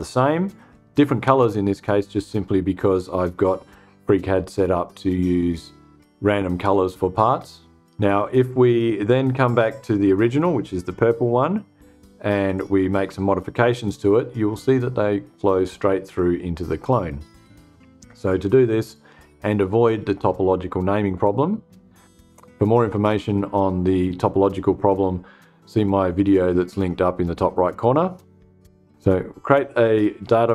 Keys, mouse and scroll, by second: 12.0 click, 29.9 click.